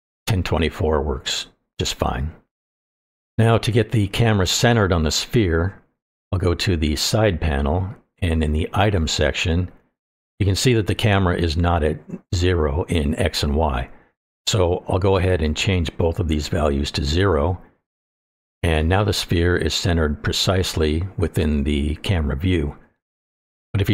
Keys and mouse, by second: 6.6 click, 10.2 click, 15.6 click, 17.0-18.2 drag.